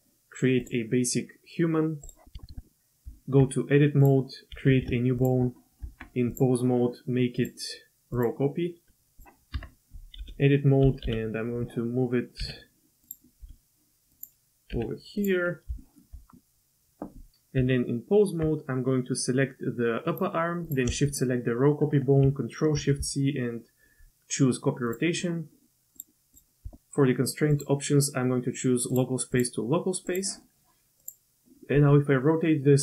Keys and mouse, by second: 2.4 shift+middle drag, 2.5 shift+click, 2.7 middle click, 3.0 Tab, 4.0 click, 4.7 shift+a, 5.8 Tab, 6.3 click, 8.2 click, 9.6 Tab, 10.2 KP_4, 11.0 KP_1, 12.4 g, 13.4 s, 14.7 g, 15.8 shift+click, 15.9 shift+middle click, 17.6 Tab, 20.2 click, 21.1 shift+click, 22.7 ctrl+shift+c, 26.3-28.9 drag, 29.4-30.1 drag, 31.0 click, 31.7 r.